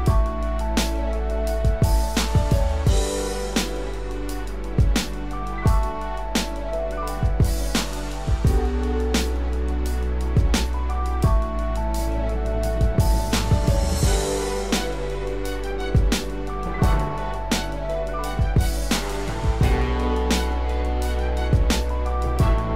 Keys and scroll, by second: 5.6 ctrl+=.